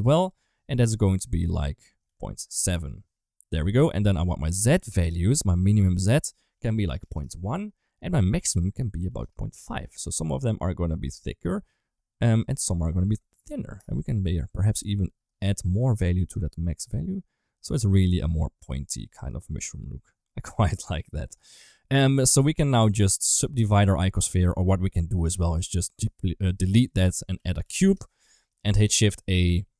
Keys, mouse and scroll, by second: 0.1-2.4 drag, 5.8-7.0 drag, 8.1-9.1 drag, 9.9 middle click, 11.1 middle click, 12.2-13.7 drag, 14.2 middle click, 15.7 click, 16.7 middle click, 17.8 middle click, 19.2 click, 20.2 ctrl+s, 21.3 middle click, 21.8 middle click, 22.4 click, 23.1 click, 25.4 click, 26.1 ctrl+x, 26.8-28.4 drag, 28.8 shift+a.